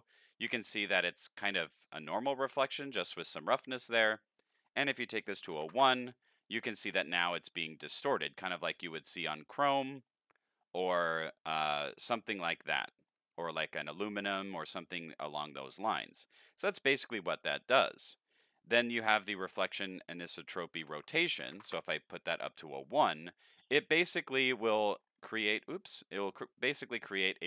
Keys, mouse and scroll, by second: 1.5-2.6 middle drag, 4.5 click, 8.7-9.4 middle drag, 10.0-10.5 middle drag, 10.7-11.1 middle drag, 12.1 middle drag, 12.3-13.1 middle drag, 13.4-14.2 middle drag, 14.7 middle drag, 15.3 middle click, 19.4 click, 20.8 End, 22.8-23.7 middle drag, 24.1-24.5 scroll up 5, 25.1-25.7 scroll down 7, 25.7-26.5 middle drag, 26.8-27.4 middle drag.